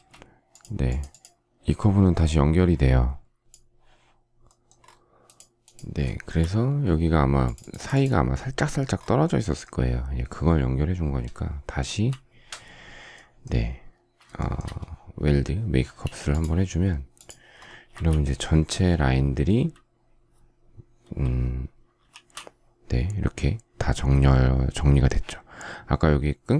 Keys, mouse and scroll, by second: 5.9 shift+middle click, 11.7 shift+w, 14.2 shift+middle click, 15.7 space, 21.9 shift+w.